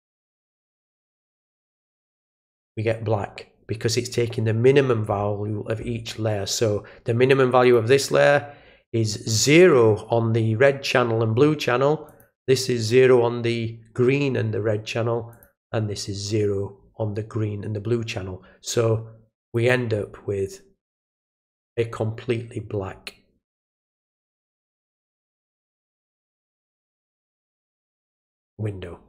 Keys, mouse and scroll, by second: 0.4 click, 2.0 click, 7.6 click, 12.0 click, 15.3 click, 19.4 click, 20.4 click, 21.5 right click, 26.3 click, 28.2 click.